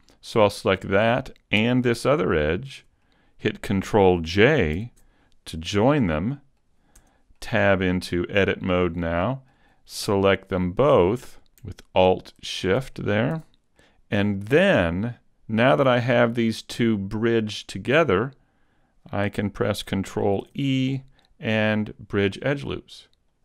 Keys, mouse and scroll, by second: 0.4 middle click, 2.6 shift+right click, 3.0 middle click, 4.7 ctrl+j, 6.1 middle click, 6.9 Tab, 7.3 middle click, 9.2 middle click, 10.7 shift+right click, 11.1 middle click, 11.5 middle click, 12.9 middle click, 13.0 super+z, 13.7 middle click, 16.5 middle click, 20.4 ctrl+e.